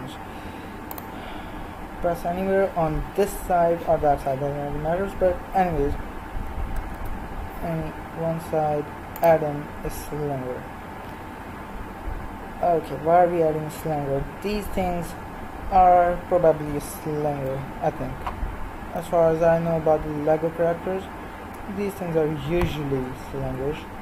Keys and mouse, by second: 2.5-4.4 drag, 7.0 shift+a, 17.3 KP_3, 19.0 z, 19.5 middle click, 21.9-24.0 middle drag.